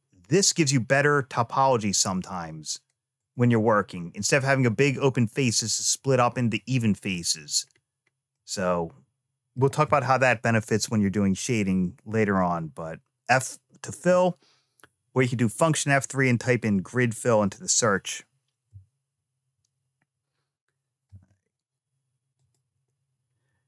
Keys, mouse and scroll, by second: 3.0 click, 6.9 click, 7.6-8.2 scroll down 2, 8.2-9.4 middle drag, 22.2 click.